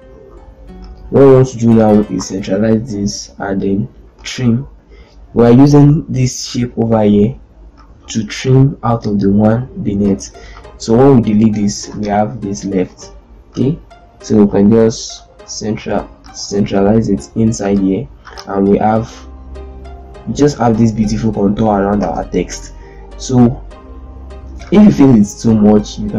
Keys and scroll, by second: 1.9 shift+c, 2.0 shift+e, 11.0 Delete, 11.4 z, 12.6 ctrl+space, 15.3 shift+c, 16.3 shift+c, 16.4 shift+e, 18.0 z, 21.8 ctrl+space.